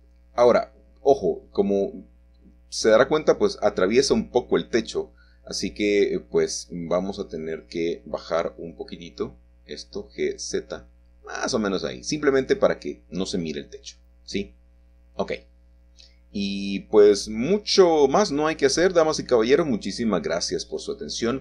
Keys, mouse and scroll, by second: 0.3 middle click, 0.9-1.5 scroll down 2, 1.5-2.9 scroll down 1, 2.9 scroll down 1, 5.8 click, 8.1 middle click, 9.3 g, 13.9-16.9 drag, 17.6-21.4 middle drag, 20.1-21.4 scroll down 2.